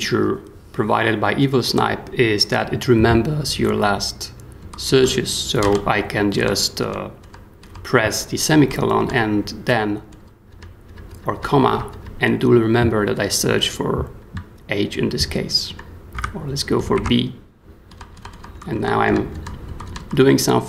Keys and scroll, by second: 4.6 j, 5.6 ;, 6.4 ;, 7.2 ;, 8.6 ;, 10.1 ;, 10.5 ,, 11.1 ,, 11.6 ,, 15.7-20.4 typing.